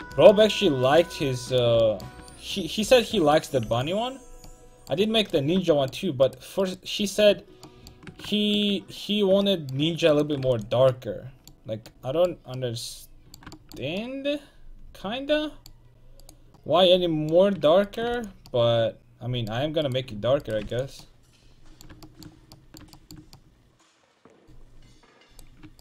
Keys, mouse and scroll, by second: 0.9-2.6 right drag, 3.7 x, 10.2-12.2 right drag, 10.5 x, 16.3-18.2 right drag, 16.6-18.2 drag, 18.2 x, 20.7 x, 25.4-25.8 right drag.